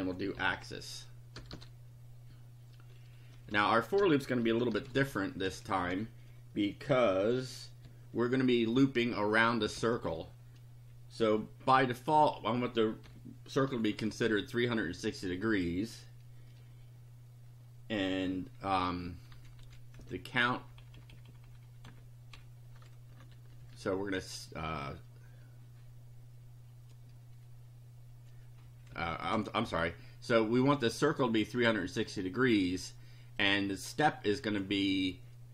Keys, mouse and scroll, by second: 0.0-1.3 typing, 3.5-6.0 typing, 7.9 Left, 8.8 Left, 11.2 Left, 13.1 Delete, 13.7 KP_3, 13.9 KP_6, 14.3 KP_0, 19.3 Right, 20.0 Left, 20.6 Delete, 23.1 KP_3, 23.3 KP_6, 23.5 KP_0, 28.9 Left, 31.2-32.3 drag, 33.4 click, 34.5 click.